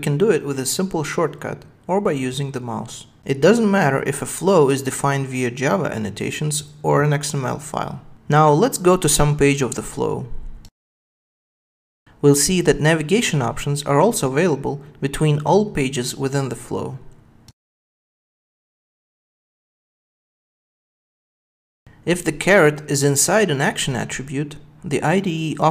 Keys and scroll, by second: 3.2 super+b, 8.4 super+1, 14.8 super+b, 19.3 super+b, 23.5 super+w, 25.2 ctrl+space.